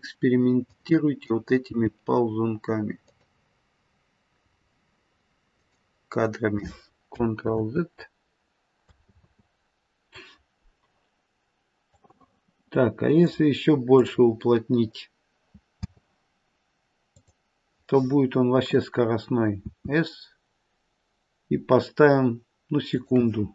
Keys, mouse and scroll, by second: 0.6 click, 1.6 g, 4.3 g, 7.5 ctrl+z, 9.0 ctrl+z, 11.8 click, 13.9 click, 15.7 space, 18.8 click, 19.5 s.